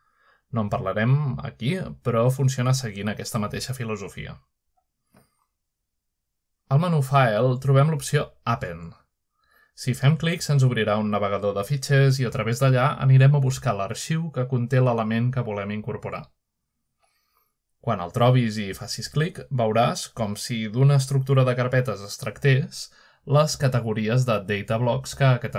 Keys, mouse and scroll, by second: 0.5 drag, 2.1 click, 6.5-7.0 scroll up 1, 7.0 scroll down 1, 7.7-8.6 shift+middle drag, 8.9 click, 11.5 click, 14.1 click, 15.2-15.7 scroll up 1, 15.7 click, 16.1 click, 16.3 click, 18.6 click, 18.9 click, 20.9 click, 22.7 click, 23.0 click.